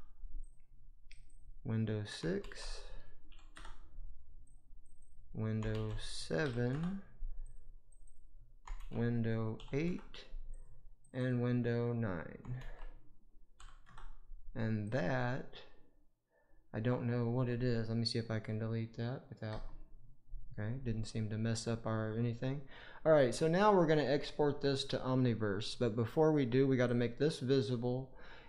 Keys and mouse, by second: 1.2-3.5 drag, 4.4 click, 4.9-6.6 drag, 7.8 click, 8.0-9.8 drag, 10.5 click, 11.1-13.8 drag, 14.7 click, 19.4 Delete, 24.2-24.9 middle drag, 26.8 click.